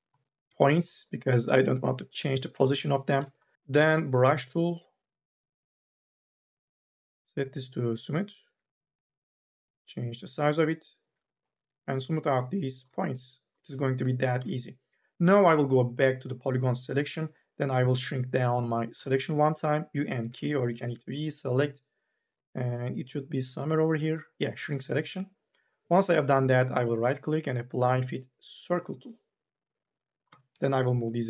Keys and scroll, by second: 3.5 e, 14.2 3, 18.7 u, 19.1 k, 20.5 ctrl+z, 20.8 v, 30.1 e.